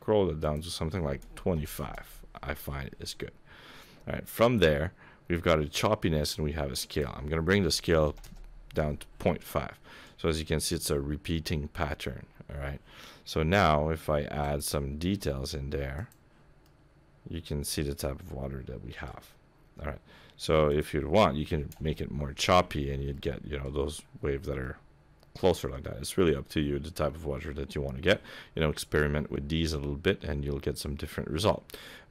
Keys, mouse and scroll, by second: 0.4 click, 6.9 click, 9.4-9.9 scroll down 6, 10.0 middle click, 12.1-12.9 scroll up 5, 14.4 click, 15.9 click, 16.6 middle click, 20.7 click, 23.1 middle click, 24.6 middle click.